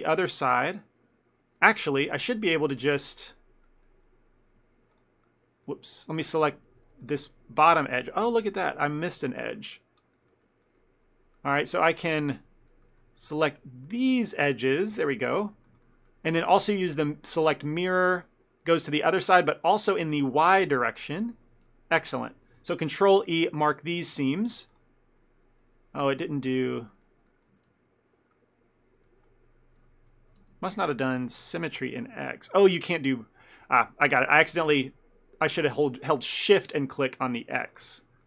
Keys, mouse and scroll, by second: 0.0 ctrl+middle click, 0.9 middle click, 1.8 shift+middle click, 2.2 middle click, 3.8 middle click, 5.0 shift+click, 5.4 middle click, 6.0 ctrl+middle click, 6.8 ctrl+z, 7.1 shift+click, 8.2 shift+middle click, 8.5 ctrl+middle click, 9.8 middle click, 10.4 shift+middle click, 12.0 middle click, 12.9 shift+middle click, 14.5 ctrl+click, 14.9 ctrl+middle click, 15.1 shift+middle click, 15.4 middle click, 15.9 ctrl+middle click, 16.2 middle click, 16.6 space, 18.4 middle click, 20.1 click, 21.0 middle click, 23.0 ctrl+e, 26.4 middle click, 26.7 shift+middle click, 27.0 ctrl+middle click, 27.4 middle click, 27.8 ctrl+z, 28.4 middle click, 29.4 middle click, 30.5 space, 37.8 click.